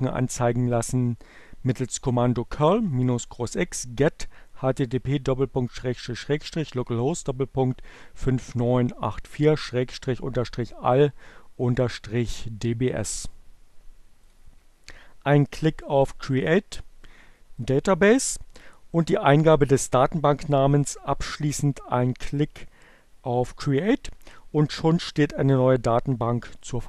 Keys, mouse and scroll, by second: 13.5 click, 16.8 click.